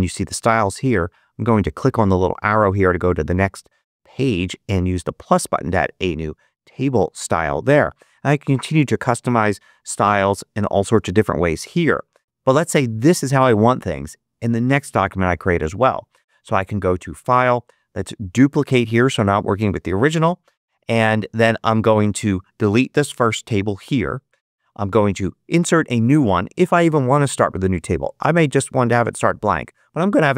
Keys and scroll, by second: 23.7 BackSpace.